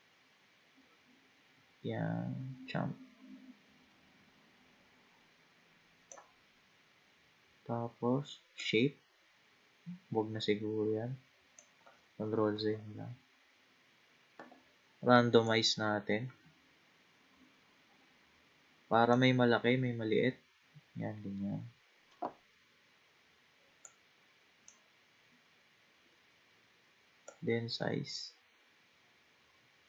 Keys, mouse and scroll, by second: 8.6-11.6 drag, 12.6 ctrl+z, 13.4-15.4 scroll up 2, 15.5-18.5 drag, 19.7-21.3 scroll up 3, 21.3-22.2 scroll down 1, 23.8-26.9 drag, 27.3-29.8 drag.